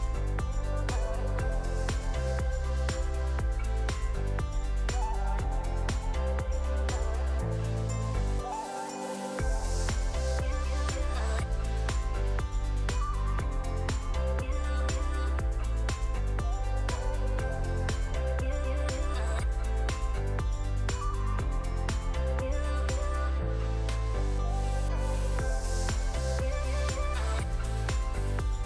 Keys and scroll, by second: 0.0 ctrl+d, 0.1 ctrl+d, 0.8 v, 9.7 v, 10.7 ctrl+z, 11.1 ctrl+v, 27.4 v.